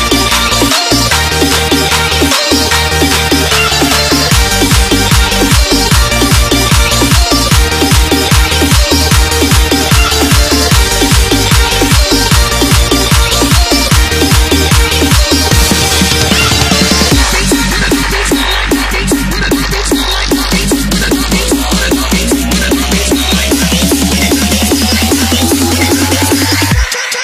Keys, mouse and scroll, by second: 0.2 Return, 0.6 alt+click, 1.2 Return, 2.2 Return, 2.8 alt+click, 3.2 Return, 5.0 Return, 5.4 click, 6.0 Return, 6.6 click, 7.4 Delete, 7.8 click, 8.4 s, 10.4 s, 10.4 click, 11.9 click, 13.6 ctrl+s, 15.7 click, 18.0 Delete, 18.2 click, 19.0 s, 21.1 click, 23.2 Delete, 23.6 click, 24.4 s, 27.0 click.